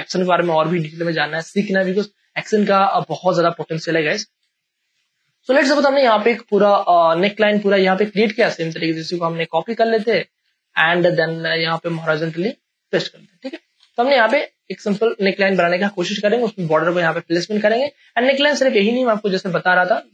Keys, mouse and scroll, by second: 0.4 ctrl+click, 1.7 a, 2.9-4.4 ctrl+drag, 4.4 ctrl+space, 4.7 ctrl+click, 5.0 ctrl+space, 5.6 ctrl+space, 6.4 space, 6.6 click, 6.9 space, 7.4 ctrl+click, 8.4 a, 9.4 alt+click, 10.4 ctrl+t, 10.6 ctrl+right click, 11.4-13.7 drag, 13.7 Return, 14.3 space, 14.5 click, 15.6 space, 15.8-17.5 ctrl+drag, 17.5 space, 17.7 ctrl+click.